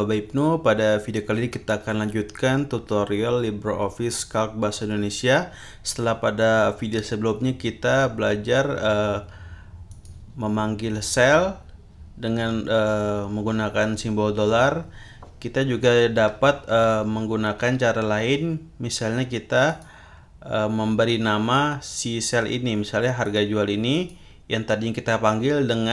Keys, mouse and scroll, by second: 9.9 click, 19.7 click, 23.2 click, 23.9 click.